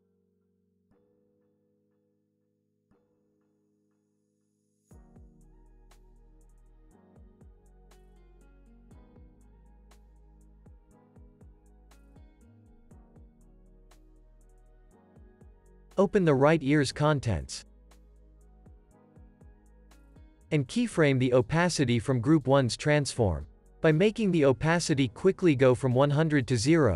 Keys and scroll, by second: 1.7 0, 1.8 Return, 8.0 Right, 23.5 alt+x, 26.5 0, 26.5 Return.